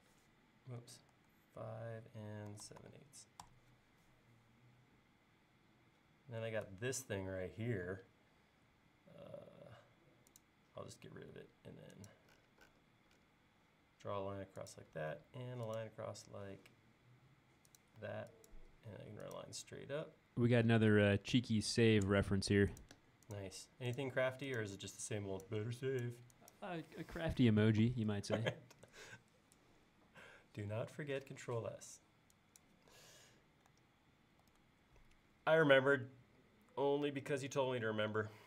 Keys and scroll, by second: 0.0-0.8 typing, 2.3-3.5 typing, 3.5 Return, 7.9 e, 11.1 l, 14.9 l, 18.1 e, 24.8 e, 34.5 super+s.